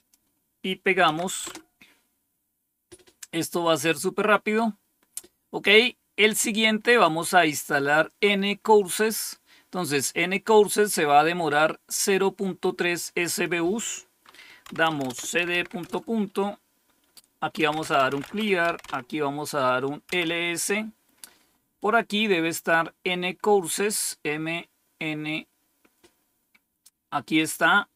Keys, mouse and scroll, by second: 1.0 Tab, 1.3 Return, 7.5 click, 13.2 click, 14.3-16.0 typing, 17.2-20.0 typing, 27.3-27.9 drag.